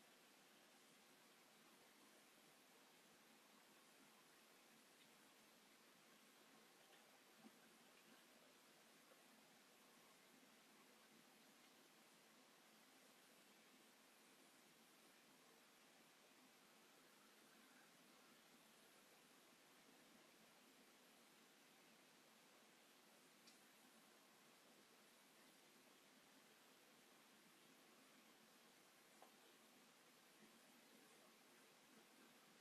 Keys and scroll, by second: 5.8 m, 19.5 space, 23.2 Escape, 29.4 m, 30.3 space, 31.0 shift+x.